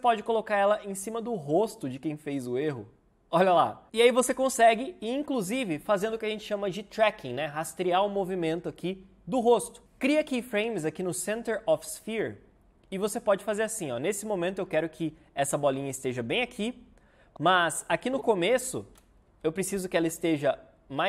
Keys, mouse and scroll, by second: 19.2 Right.